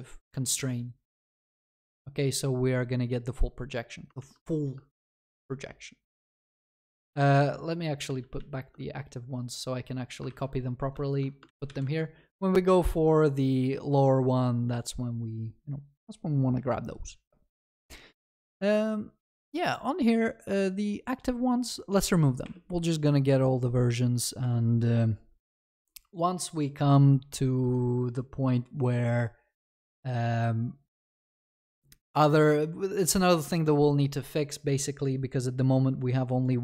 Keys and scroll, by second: 4.2 ctrl+c, 7.4 ctrl+z, 11.4 ctrl+c, 11.5 ctrl+v, 25.6 ctrl+s.